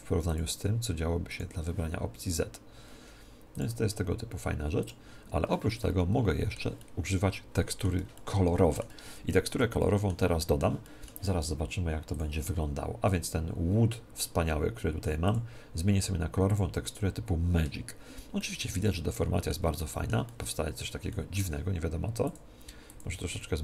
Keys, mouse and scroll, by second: 0.2-2.1 drag, 3.5-5.3 drag, 5.7-12.5 middle drag, 9.0 Tab, 9.5 Tab, 12.1-13.9 drag, 15.2-17.2 drag, 18.3-22.9 middle drag, 22.2-23.6 drag.